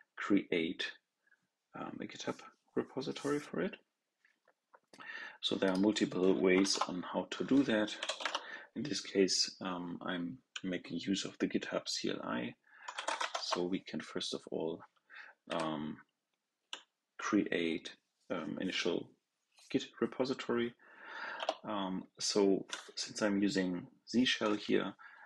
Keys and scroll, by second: 6.5 ctrl+l.